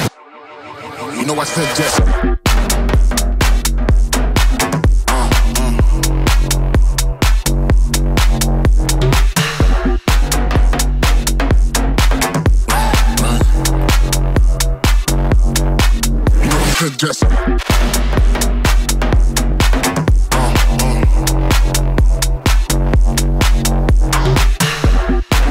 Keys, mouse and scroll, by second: 0.2 Tab, 0.5 BackSpace, 0.7 k, 0.8 BackSpace, 1.3 scroll down 4, 1.4 scroll up 3, 2.4 click, 3.0 Tab, 3.3 shift+c, 3.4 scroll up 3, 3.6-4.1 scroll down 2, 4.1 shift+c, 7.0 click, 8.9-9.9 scroll down 2, 16.0 click, 17.1-17.6 scroll up 3, 18.1-18.6 scroll down 4, 18.8-25.1 drag, 25.1-25.5 scroll up 10.